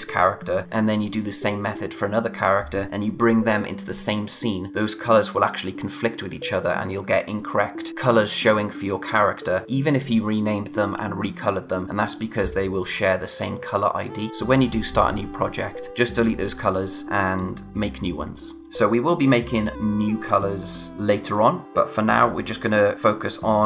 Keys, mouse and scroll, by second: 17.3 click.